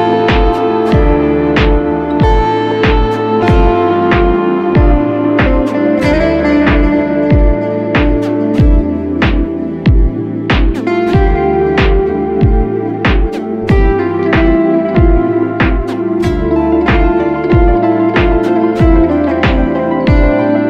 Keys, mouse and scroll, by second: 5.1 double click, 5.7 right click, 18.1 alt+click.